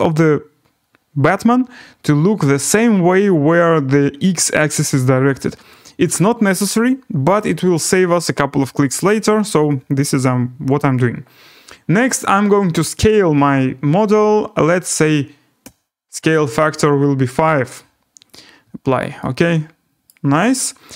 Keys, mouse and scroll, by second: 3.7 scroll, 4.7-5.3 scroll, 12.0 click, 14.9 click, 15.6 typing, 16.6-17.3 scroll, 18.3 click, 20.0 right click.